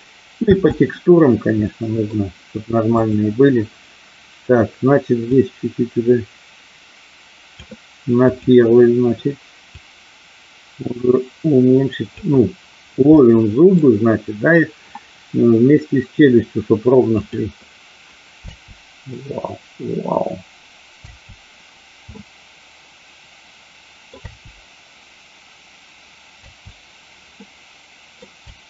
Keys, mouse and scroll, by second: 0.4 space, 1.7 middle click, 3.0 click, 5.4-7.6 drag, 8.2 click, 9.8-12.2 drag, 13.2 middle click, 17.1 click, 18.6 space, 22.2-24.2 middle drag, 22.2 space, 24.2 space, 27.4 middle click, 27.4 space, 28.4 space.